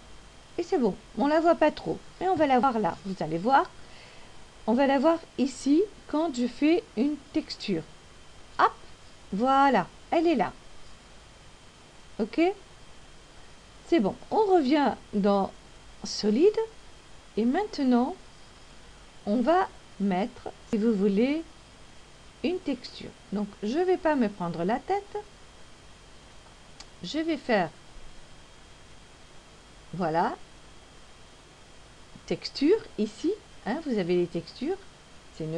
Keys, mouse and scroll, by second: 6.4 click, 16.0 click, 31.0 click.